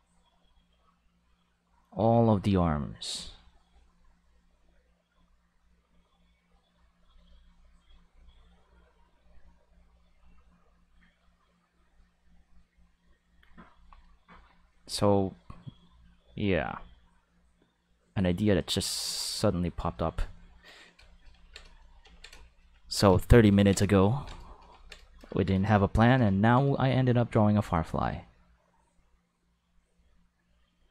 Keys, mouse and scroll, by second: 8.0-14.1 drag, 14.6 click, 25.7 shift+middle click, 26.3 ctrl+middle click, 27.7-30.9 drag.